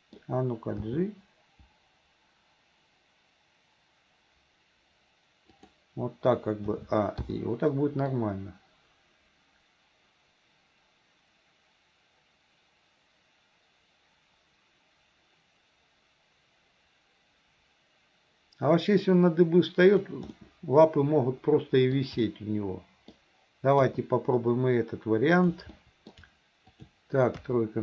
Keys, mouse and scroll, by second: 6.7 a, 7.2 i, 8.2-20.1 drag, 20.4-22.0 middle drag, 22.3 middle click, 23.9 KP_3, 25.3 click, 25.7 middle click, 26.7 shift+click, 27.4 KP_3.